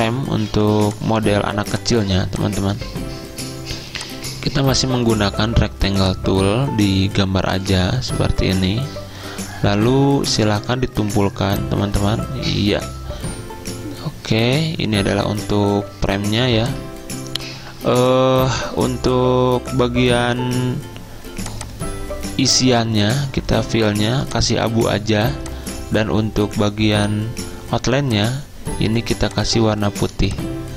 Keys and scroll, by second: 15.2 v.